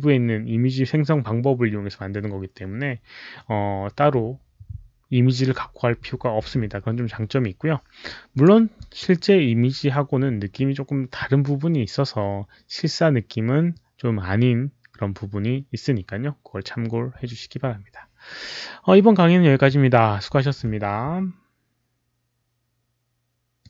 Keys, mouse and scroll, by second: 8.2 click, 8.7 drag, 19.0 click, 23.5 click.